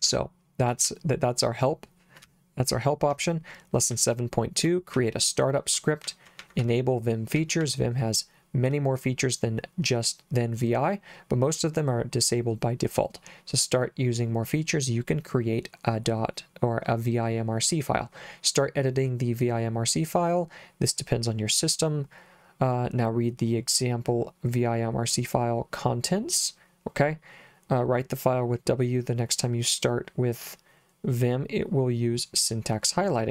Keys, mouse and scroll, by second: 0.0 j, 0.8 k, 2.2 j, 3.9 j, 4.9 j, 6.0-7.6 typing.